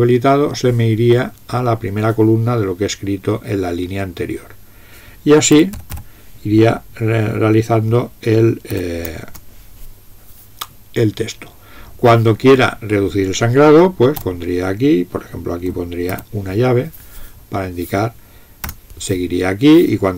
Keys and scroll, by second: 5.4-6.4 typing, 8.8 typing, 9.3 Return, 14.3 BackSpace, 16.1 }, 18.7 Return.